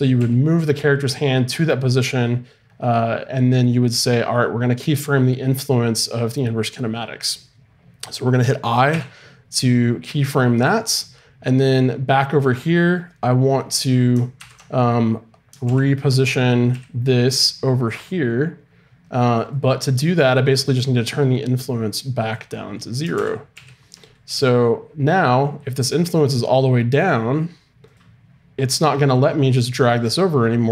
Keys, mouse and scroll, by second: 0.1 g, 8.9 i, 11.7-13.4 drag, 14.4 alt+r, 15.6 alt+g, 16.7 g, 22.3 click, 23.1 alt+r, 23.5 alt+g, 24.3 g.